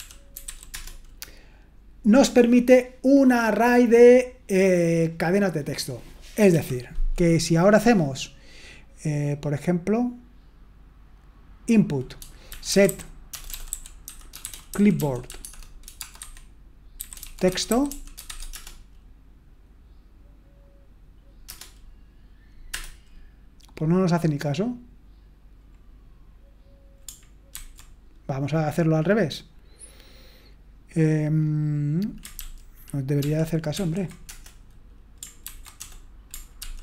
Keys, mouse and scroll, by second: 0.0-1.0 typing, 6.5 typing, 12.3-18.8 typing, 21.4 Return, 27.5 ctrl+c, 33.7 ctrl+p, 34.3 Return, 35.4 ctrl+c, 35.8 BackSpace, 36.6 ctrl+p.